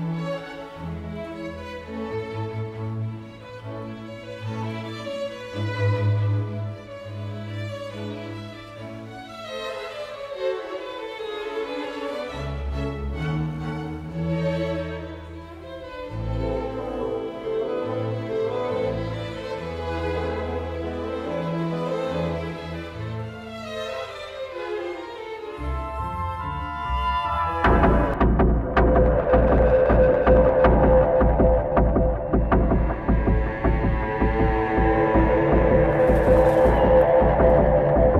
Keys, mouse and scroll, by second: 1.3-1.8 alt+scroll down 1, 1.8 alt+scroll up 1, 5.4-5.9 alt+scroll, 6.4 w, 8.7 w, 8.8 double click, 13.0 double click, 19.4-19.7 alt+scroll up 1, 21.9 alt+scroll down 1, 22.6 alt+scroll up 1, 23.6 alt+scroll down 1, 26.1 double click, 29.4 alt+scroll up 1, 30.6-31.2 alt+scroll up 1, 33.2 alt+scroll down 1, 35.9 alt+scroll, 35.9 alt+scroll up 1, 37.0 alt+scroll up 1.